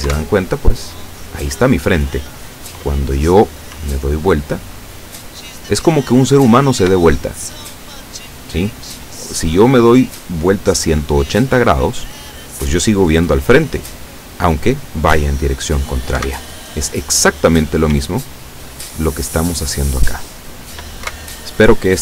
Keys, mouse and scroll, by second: 0.2 Up, 3.8 w, 16.2 Up, 18.0 w, 21.1 Up.